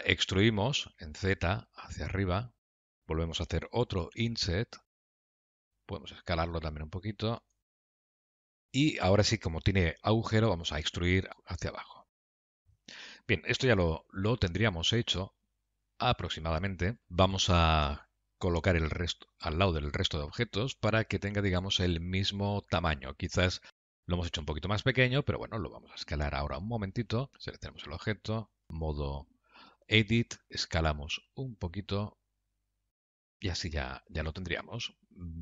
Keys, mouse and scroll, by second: 5.7 s, 14.1 alt+z, 14.7 middle click, 19.9 Tab, 20.6 KP_Decimal, 21.6 scroll down 2, 22.3 middle click, 27.0 a, 27.3 click, 27.9 a, 28.7 Tab, 28.7 click, 30.0 a, 30.7 s, 34.8 middle click.